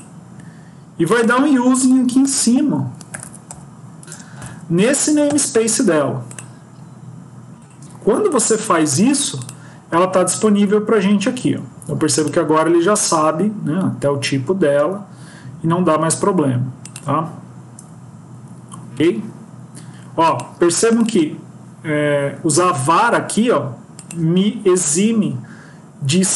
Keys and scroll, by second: 4.3 ctrl+v.